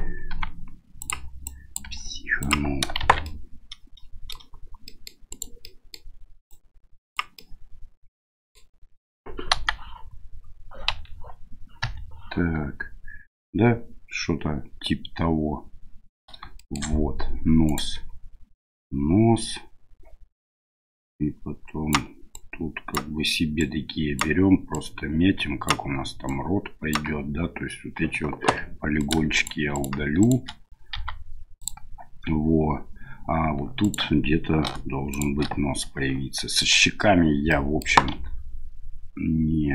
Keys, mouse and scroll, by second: 0.3 g, 1.5 click, 1.8 g, 3.0 shift+z, 3.2-4.4 middle drag, 4.9 middle click, 5.3 right click, 5.6 middle click, 6.5 click, 7.4 middle click, 7.6 click, 9.5 KP_1, 10.9 KP_Divide, 11.8 KP_1, 16.5 shift+middle click, 17.6 right click, 20.9-21.9 right drag, 22.3 right click, 23.6 right click, 24.7 right click, 26.2 right click, 28.5 3, 29.0 right click, 29.3 shift+right click, 29.7 shift+right click, 30.2 shift+right click, 30.9 x, 33.8 right click, 35.1 shift+right click, 37.5 middle click, 38.1 e.